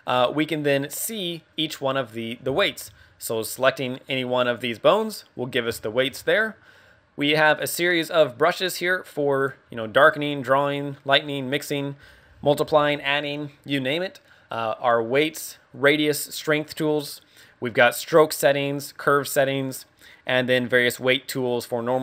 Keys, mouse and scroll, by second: 1.0 middle click, 2.5 shift+middle click, 3.3 click, 3.9 click, 4.4 click, 5.1 click, 5.8 shift+middle click, 6.2 scroll up 4, 7.5 click, 16.7 scroll down 1, 17.9 click, 18.2 click, 19.6 click, 20.5 scroll down 3.